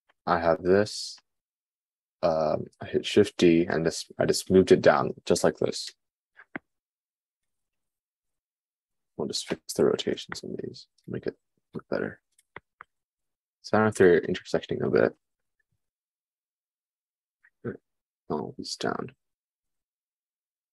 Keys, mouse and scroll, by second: 8.0-9.9 drag, 15.5-17.1 middle drag, 17.1 shift+click, 17.3-20.7 shift+middle drag, 18.0 g.